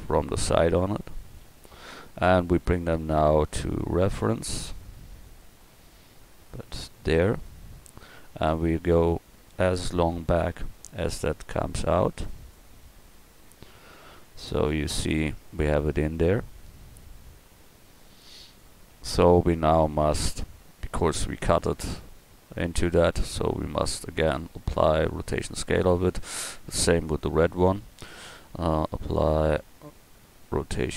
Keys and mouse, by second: 1.4 KP_1, 3.8-5.0 drag, 7.8-9.1 middle drag, 9.1-11.5 drag, 12.8 middle click, 14.3 middle click, 14.7-15.9 middle drag, 17.2-18.9 middle drag, 21.1 middle click, 21.4 middle click, 27.1-28.7 drag.